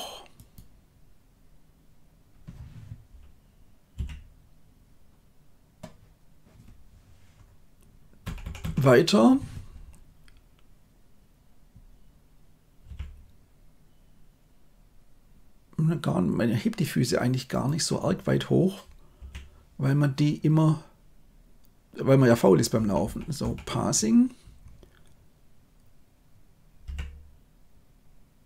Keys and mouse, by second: 3.8 i, 8.1 Right, 8.3 Right, 8.5 Right, 12.8 g, 19.1 i, 22.7 Right, 23.0 Right, 23.3 Right, 26.8 g.